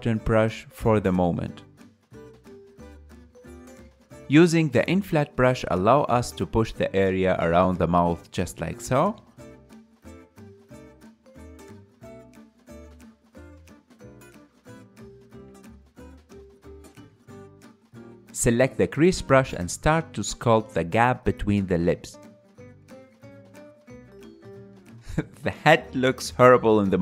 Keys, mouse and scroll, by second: 0.4 f, 1.3 click, 2.3 KP_3, 2.5 click, 2.6 ctrl+middle click, 3.3 KP_1, 3.4 ctrl+shift+middle click, 3.6-4.6 drag, 4.6-9.0 middle drag, 9.0-10.4 drag, 10.4 KP_1, 11.2 ctrl+middle click, 12.1-14.4 drag, 14.4 ctrl+middle click, 15.1 click, 15.6 middle click, 15.9 click, 16.4 middle click, 16.7 click, 17.0-18.4 middle drag, 18.4 KP_1, 19.6-20.8 drag, 20.8 f, 22.1 ctrl+middle click, 22.7 click, 23.9-26.4 ctrl+middle drag, 26.4 KP_1.